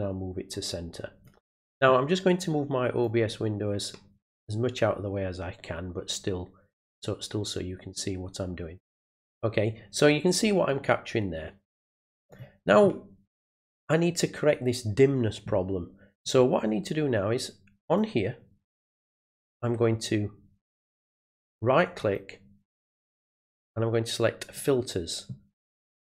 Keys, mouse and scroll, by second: 3.0-12.3 drag, 17.8 click, 22.0 right click, 22.7 right click, 24.5 click.